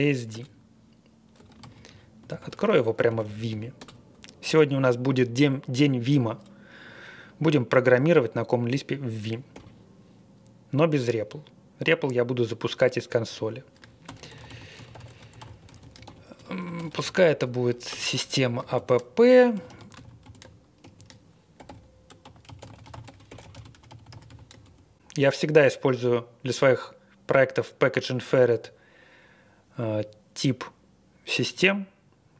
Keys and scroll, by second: 0.0-0.2 typing, 0.3 Return, 1.6 ctrl+a, 2.2 ctrl+a, 2.7-3.8 typing, 9.5 i, 14.0-17.6 typing, 17.9 Return, 18.7-25.1 typing.